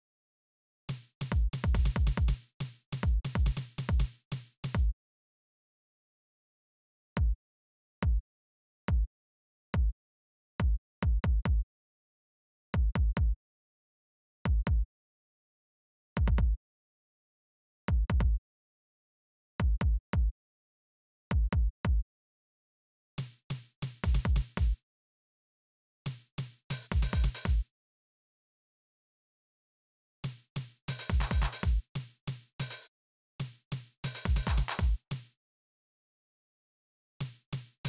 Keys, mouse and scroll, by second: 0.4 space, 2.3 right click, 3.4 right click, 4.2 right click, 4.5-5.1 scroll up 1, 4.5 space, 5.5 click, 6.3 space, 9.7 click, 11.3 right click, 13.9 right click, 15.0 click, 17.1 right click, 18.4 right click, 19.0 click, 22.0 space, 22.3 click, 24.5 space, 24.7 click, 25.6 space, 27.3 space, 28.2 click, 29.2 click, 29.8 space, 30.5 click, 31.4 click, 32.0 right click, 32.4 space, 33.6 click, 34.1 right click, 34.9 space, 36.3 right click, 36.7 space.